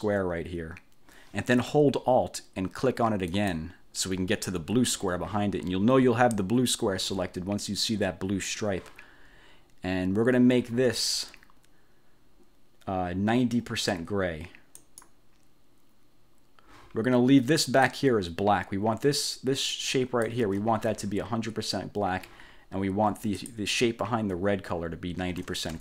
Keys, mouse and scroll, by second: 3.5 alt+click, 14.9 click, 17.8 click, 19.8 click, 20.5 ctrl+z, 23.1-23.8 ctrl+scroll up 2, 24.6 scroll up 2.